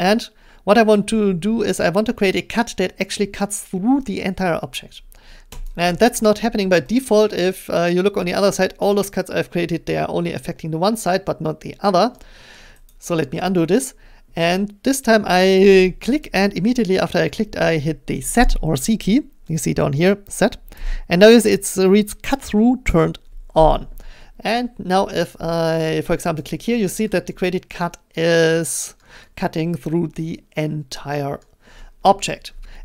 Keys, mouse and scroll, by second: 5.7 click, 6.9-10.8 drag, 12.1 middle click, 12.9 middle click, 12.9-16.2 scroll, 16.2 click, 20.8 z, 26.4-28.2 drag, 28.2 middle click, 28.6 click, 30.4 click, 31.4 click, 31.7-32.8 middle drag.